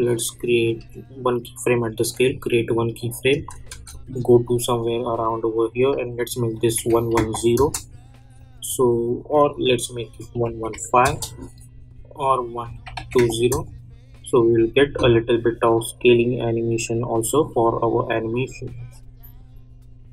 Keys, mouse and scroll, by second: 0.8 s, 2.2 click, 3.5 space, 3.9-6.5 drag, 7.5 Return, 8.3 click, 11.0 Return, 12.5 click, 13.5 Return, 14.4 click, 14.8 space.